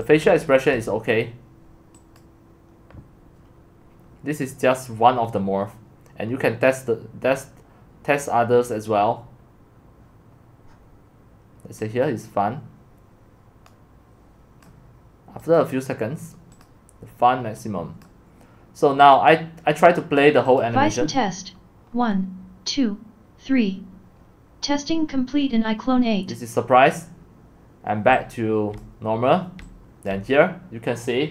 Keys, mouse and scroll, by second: 0.0-0.2 typing, 0.8-7.3 drag, 14.6-21.6 drag, 21.6-25.7 scroll down 1, 25.7-26.9 scroll down 1, 26.9-28.1 scroll down 1, 28.6-29.6 typing, 28.8 click, 30.1-31.3 drag.